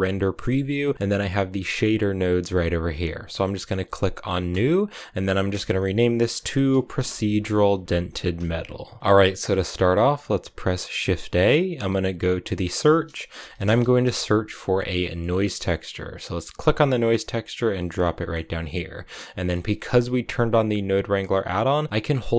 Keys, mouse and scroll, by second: 4.3-8.4 drag, 9.0-10.8 middle drag, 10.8 shift+a, 17.8 scroll down 4, 17.9 middle click, 18.4 click, 19.2-20.2 scroll up 2, 19.2 middle click, 20.2-22.3 drag.